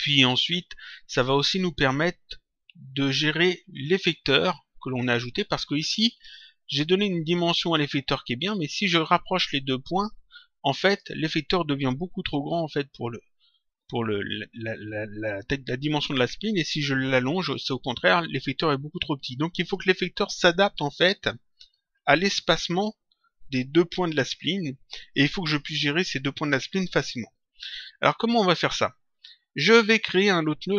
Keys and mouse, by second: 9.3 click, 16.4 click, 27.9 click.